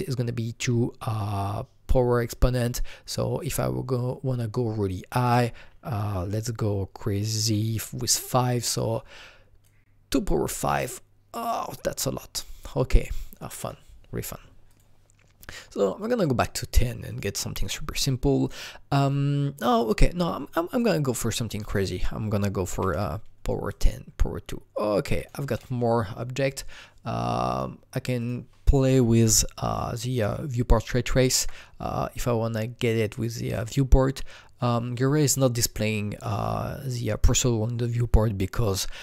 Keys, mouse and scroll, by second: 5.1 click, 5.2 double click, 7.7 KP_5, 8.6 click, 9.6 click, 12.6 click, 16.0 click, 19.3 click, 19.6 click, 21.6 click, 21.7 double click, 22.7 KP_2, 22.9 Return, 23.7 click, 25.2 click, 27.5 click, 29.3-31.8 alt+drag, 31.8-35.1 alt+drag, 37.4 alt+double click.